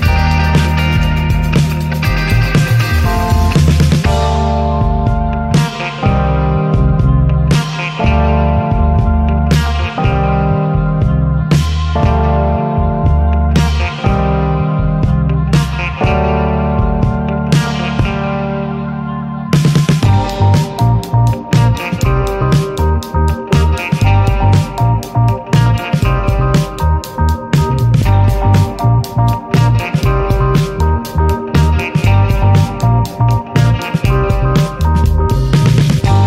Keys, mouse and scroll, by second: 0.3 alt+z, 0.5 scroll down 3, 0.7 shift+middle click, 0.9 scroll up 1, 2.1 alt+middle click, 2.7 alt+middle click, 3.5 shift+middle click, 3.7 scroll up 1, 4.4 click, 5.8 click, 6.3 click, 7.3 click, 7.7 scroll down 2, 7.9 shift+middle click, 8.3 e, 9.8 shift+middle click, 10.1 e, 11.4 click, 12.1 click, 12.9 click, 13.6 click, 14.6 click, 15.2 click, 16.4 click, 16.9 click, 18.3 click, 18.7 click, 20.4 click, 21.7 click, 23.0 click, 23.9 click, 24.5 click, 27.4 click, 28.2 drag, 28.7 click, 29.0 scroll down 1, 29.2 shift+middle click, 29.5 click, 29.8 scroll down 2, 30.0 shift+middle click, 30.5 e, 32.0 shift+middle click, 32.2 scroll up 1, 32.4 e, 35.1 alt+z, 35.4 scroll down 4, 35.6 alt+z, 35.8 scroll up 4, 36.1 shift+middle click.